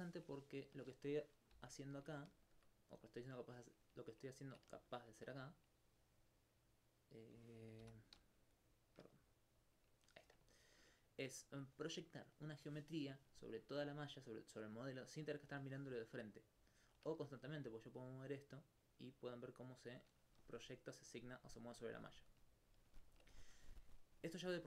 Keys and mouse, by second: 0.9 ctrl+middle click, 1.6 m, 2.5 shift+click, 7.8 m, 8.7 shift+click, 13.4 alt+click, 14.1 alt+click, 16.1 alt+click, 16.7 alt+click, 17.6 alt+click, 22.4 right click, 22.7 alt+click, 23.0 alt+click.